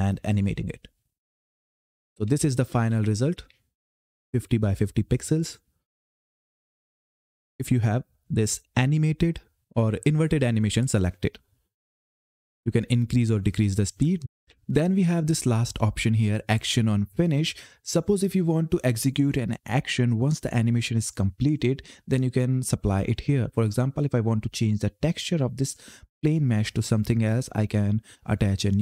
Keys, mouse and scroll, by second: 1.5-4.9 typing, 6.6 click, 9.8-11.0 scroll down 1, 12.3 click, 14.3 Page_Up, 15.5 click, 23.5 click, 27.3 click.